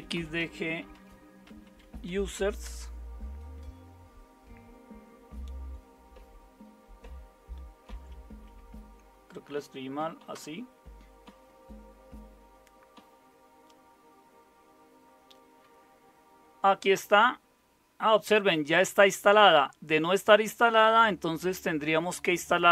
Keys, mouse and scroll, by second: 0.0-2.6 typing, 2.6 Return, 7.9 Up, 9.3 Left, 9.8 Delete, 10.3 Return.